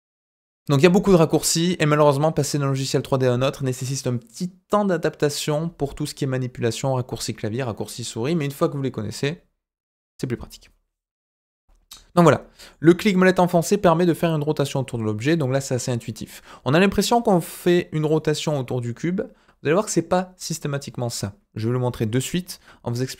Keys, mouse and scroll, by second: 14.3-18.0 middle drag.